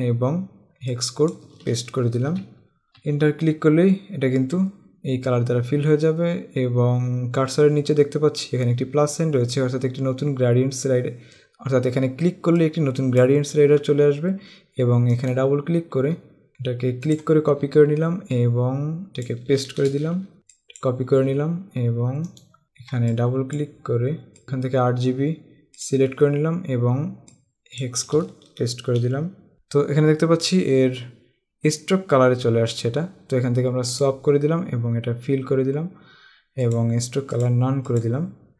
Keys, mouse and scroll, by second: 3.1 Return, 15.4 click, 17.3 click, 17.7 alt+Tab, 19.1 click, 20.4 Tab, 20.7 click, 21.2 alt+Tab, 22.6 click, 23.3 click, 26.0 click, 27.4 click, 34.2 click, 36.8 click.